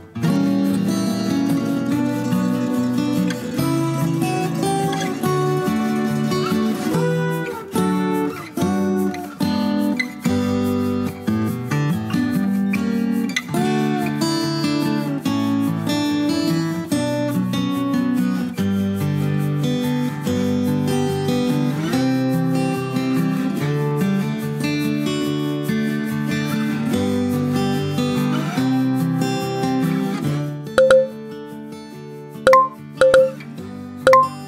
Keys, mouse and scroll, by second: 1.1 click, 2.5 click, 3.3 click, 4.5 click, 6.2 click, 6.7 click, 8.7 ctrl+w, 9.1 click, 11.6 click, 13.5 ctrl+middle click, 16.2 click, 18.7 click, 21.3 click, 25.4 click, 26.2 click, 27.4 click, 30.7 click, 31.8 right click.